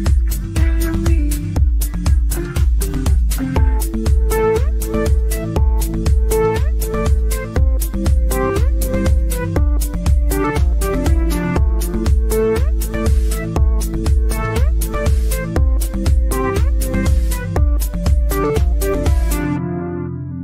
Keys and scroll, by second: 0.2 ctrl+z, 2.0 ctrl+z.